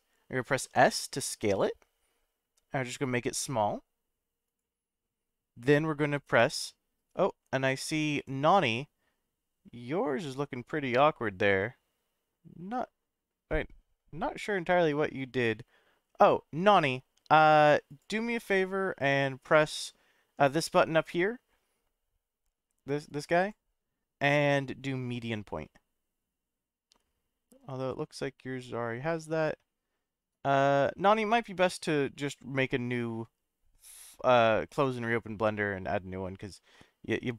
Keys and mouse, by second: 0.5 s, 4.4 click, 17.9-23.2 drag, 23.4-34.6 drag.